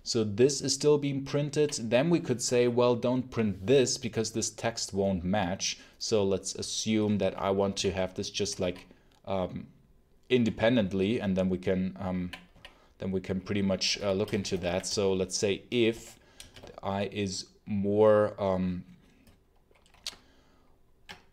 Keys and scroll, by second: 7.6 ctrl+super+l, 8.5 k, 12.1 j, 12.4 k, 13.6-16.3 typing.